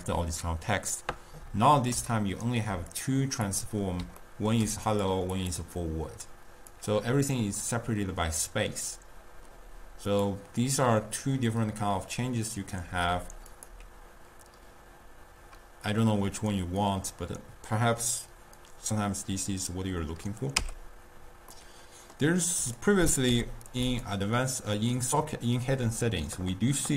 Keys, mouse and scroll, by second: 2.1-2.9 shift+middle drag, 2.9 click, 3.5 click, 4.4-4.9 ctrl+middle drag, 4.9 click, 5.4 click, 6.9 click, 10.2 click, 13.5 click, 20.9 x, 21.6-22.6 middle drag, 22.6 click, 23.3 u.